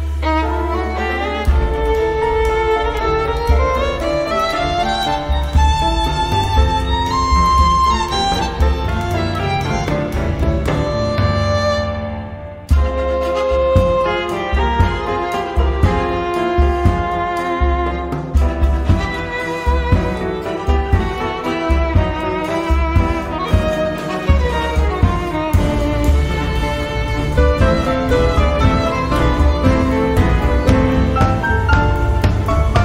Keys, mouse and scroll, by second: 0.4 click, 2.6 click, 4.8-6.4 typing, 7.5-8.5 typing, 10.0-14.6 typing, 16.5-17.7 drag, 18.0 right click, 19.8 click, 21.0 click, 23.5 click, 24.7 click, 25.6 click, 26.0 right click, 27.2 click, 30.8 click.